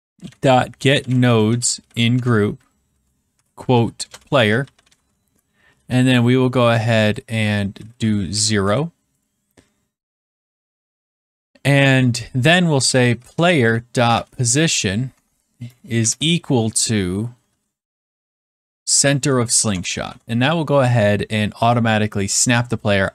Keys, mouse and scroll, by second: 0.0-6.2 typing, 7.0-8.1 drag, 7.5-8.7 typing, 10.9 Return, 12.5-14.6 typing, 15.1 Tab, 15.7-19.5 typing, 19.6 Return, 22.0 click.